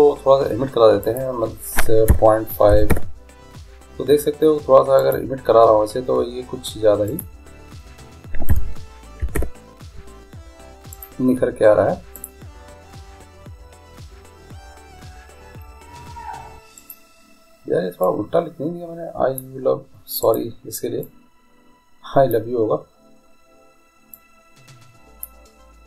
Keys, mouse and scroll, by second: 1.2-3.1 drag, 5.2-7.2 right drag, 7.3-9.3 drag, 11.1-13.9 right drag, 12.3-14.3 drag, 17.0-18.7 right drag, 18.2-19.9 drag, 20.4-22.2 right drag, 21.2-23.1 drag, 24.3-25.8 drag.